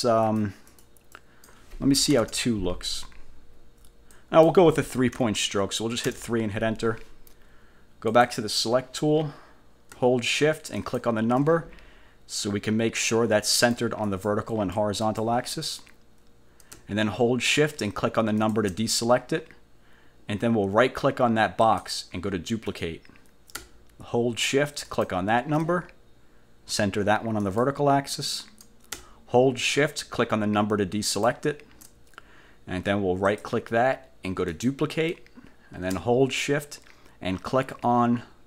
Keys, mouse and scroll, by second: 0.3 click, 0.8 click, 1.2 click, 2.2 2, 4.2 click, 5.2 3, 6.1 Return, 8.2 click, 10.9 shift+click, 13.6 click, 14.2 click, 15.2 click, 18.5 shift+click, 21.7 click, 22.8 click, 25.0 shift+click, 27.5 click, 31.2 shift+click, 33.4 click, 34.6 click.